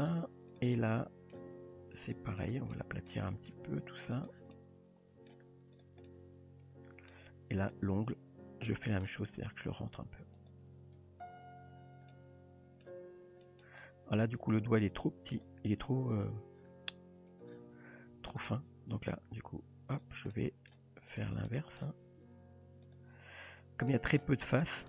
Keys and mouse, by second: 0.0 click, 0.5 click, 0.7-1.3 middle drag, 1.5 g, 2.8 middle click, 4.2 click, 4.5-5.3 middle drag, 5.8 drag, 6.1-7.1 middle drag, 8.7 middle click, 9.2 g, 11.0 Tab, 12.1-12.8 middle drag, 13.4 middle drag, 14.6 Tab, 15.3 click, 16.1 click, 17.3 click, 18.3 click, 18.9 g, 20.4 middle click, 21.2 drag, 21.5-21.8 middle drag, 22.2 g, 23.9-24.2 middle drag.